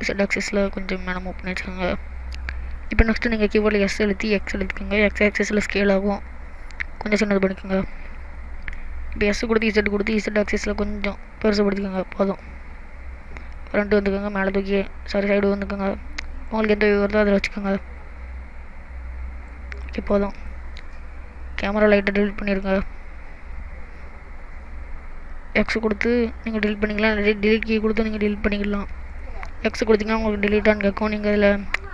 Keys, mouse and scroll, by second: 1.5 middle click, 4.5 s, 7.9 middle click, 9.4 s, 13.9 KP_1, 15.3 KP_3, 16.5 click, 19.8 click, 20.2 middle click, 21.6 click, 23.2-24.4 scroll down 2, 26.0 x, 29.1 click, 30.5 x.